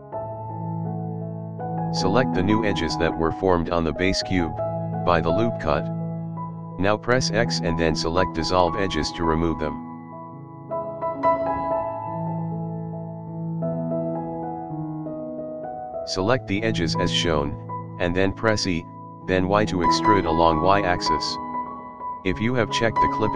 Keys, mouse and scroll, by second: 0.3-0.8 shift+middle drag, 1.2-1.5 middle drag, 1.7 click, 2.8-3.4 shift+middle drag, 4.6-5.3 middle drag, 5.7 shift+click, 6.1 shift+click, 6.5 shift+click, 6.8 shift+middle click, 7.5 shift+click, 7.9 middle click, 9.1 ctrl+click, 9.6 shift+middle click, 10.0-10.5 middle drag, 11.0 Delete, 13.3-13.6 shift+middle drag, 13.7-14.1 scroll up 4, 14.4-14.7 scroll down 3, 14.7-15.2 middle drag, 15.3-15.6 scroll down 2, 15.7 shift+middle drag, 16.5 click, 17.3 shift+click, 17.7 middle click, 18.8 e.